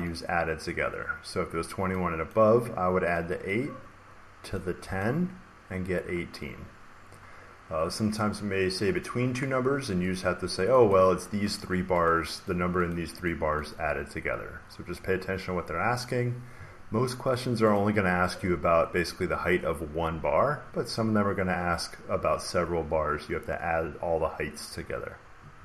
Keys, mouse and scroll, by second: 2.2 click, 3.1 click, 3.4 click, 4.5 click, 4.9 click, 10.1 click, 10.8 click, 11.5 click, 12.4 click, 12.8 click, 13.2 click, 13.6 click, 17.6 click.